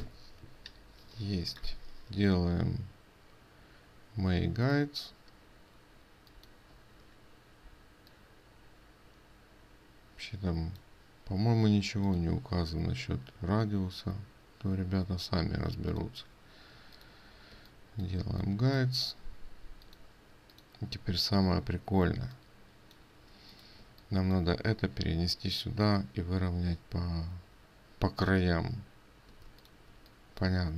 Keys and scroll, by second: 21.6 ctrl+space.